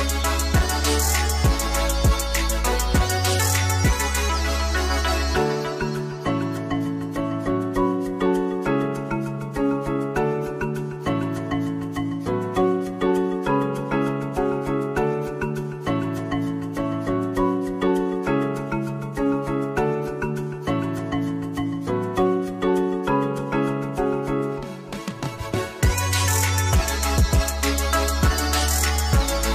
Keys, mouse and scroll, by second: 0.3 middle click, 0.4 Tab, 0.5 ctrl+b, 0.7 Escape, 0.8 z, 1.0 click, 1.5 Tab, 1.5 middle click, 1.6 click, 1.8 alt+shift+click, 2.2-3.9 shift+middle drag, 2.6 z, 3.8 Tab, 3.9 alt+click, 4.1 ctrl+z, 4.1 middle click, 4.2 scroll up 1, 4.3 alt+shift+click, 4.4 shift+middle click, 4.7 KP_Divide, 4.9 alt+shift+click, 5.0 middle click, 5.1 alt+shift+click, 5.2 middle click, 5.3 shift+click, 5.4 shift+middle click, 5.6 shift+click, 5.9 shift+middle click, 6.0 scroll down 1, 6.1 shift+middle click, 6.2 shift+click, 6.3 alt+shift+click, 6.4 shift+middle click, 6.7 shift+middle click, 6.9 click, 7.1 shift+middle click, 7.2 scroll down 1, 7.5 middle click, 7.5 scroll up 2, 7.8 click, 7.8 shift+middle click, 8.4 middle click, 8.5 shift+click, 8.6 shift+middle click, 8.6 scroll up 2, 8.8 shift+click, 8.9 middle click, 9.1 shift+click, 9.1 shift+middle click, 9.4 scroll up 2, 9.5-10.1 scroll down 2, 9.6 shift+middle click, 10.1 click, 10.3 Tab, 11.0 click, 11.0 BackSpace, 11.3 click, 11.4-14.1 middle drag, 11.4 z, 11.7 KP_0, 15.1 click, 19.0-20.4 drag, 19.2 s, 20.4-21.9 middle drag, 20.4 KP_0, 21.5 scroll up 1, 21.5 Tab, 21.7 alt+a, 21.7 ctrl+b, 21.9 shift+z, 22.4 middle click, 22.5 shift+z, 22.6 shift+click, 23.0 middle click, 23.0 s, 23.3 click, 23.3 ctrl+z, 23.6 middle click, 23.7 click, 24.0 shift+middle click, 24.3 c, 24.4 right click, 24.6 middle click, 25.1 ctrl+z, 25.2 alt+shift+click, 25.3 ctrl+z, 25.5 alt+shift+click, 25.7 ctrl+z, 25.8 alt+shift+click, 26.0 ctrl+z, 26.2 middle click, 26.2 c, 26.7 middle click, 26.7 s, 26.8-27.3 scroll down 3, 27.0 click, 27.0 middle click, 27.3 scroll up 2, 27.5 g, 27.6 right click, 27.8 click, 28.0 g, 28.4 Tab, 28.4 shift+middle click, 28.8 scroll down 2, 28.9 shift+middle click, 29.0 click, 29.3 middle click, 29.3 scroll down 1.